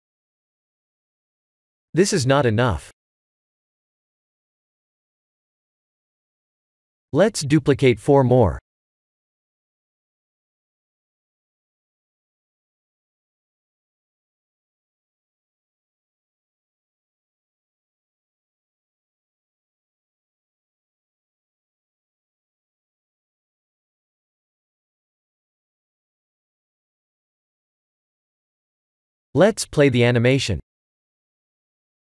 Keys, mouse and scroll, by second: 1.4 click, 2.2 click, 4.6 click, 4.6 scroll down 3, 5.7 click, 6.9 click, 7.4 right click, 11.4 click, 13.6 right click, 15.4 click, 16.1 right click, 22.8 click, 24.8 shift+d, 27.0 shift+d, 29.0 shift+d, 31.4 click.